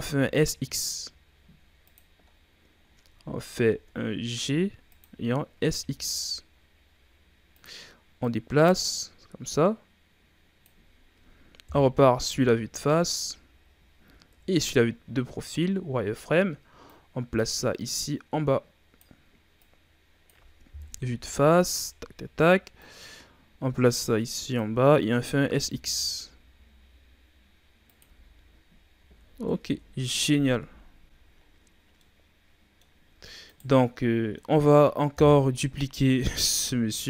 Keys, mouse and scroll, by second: 2.1-2.8 scroll up 3, 2.8 scroll down 2, 3.1-4.2 ctrl+scroll up 8, 4.2 g, 5.4 s, 8.1-11.3 drag, 11.6 KP_1, 12.1 z, 12.7-14.2 scroll down 5, 14.2 KP_3, 15.6 z, 16.8-20.7 drag, 20.7 KP_1, 21.2 z, 21.8-22.7 scroll up 3, 22.7-25.2 drag, 25.2 s, 28.0 z, 28.4-28.9 scroll up 2, 28.9 z, 29.1-29.4 scroll down 4, 29.4 Tab, 29.7 scroll down 3, 30.0 a, 30.3-31.1 scroll down 6, 31.1-31.7 scroll up 7, 31.7 scroll down 1, 31.9-32.9 middle drag, 32.9-33.4 scroll up 3, 33.4 right click, 33.7 scroll down 2, 34.0-35.1 middle drag, 35.1 KP_1, 36.2 Tab, 36.9 a.